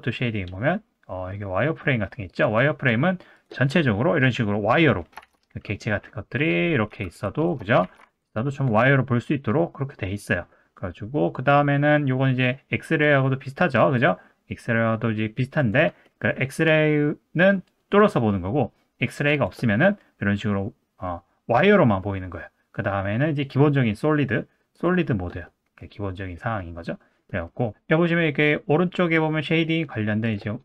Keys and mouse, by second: 3.4 click, 3.6-4.5 middle drag, 5.2 shift+a, 6.6 middle click, 6.9 g, 7.8 shift+d, 8.9-10.0 middle drag, 14.0 click, 15.6 click, 16.0 middle click, 18.1 middle click, 19.4 click, 19.8-21.0 middle drag, 21.8 middle drag, 24.7 click, 25.5 middle click, 26.4 middle click, 27.3 middle click, 30.2 click.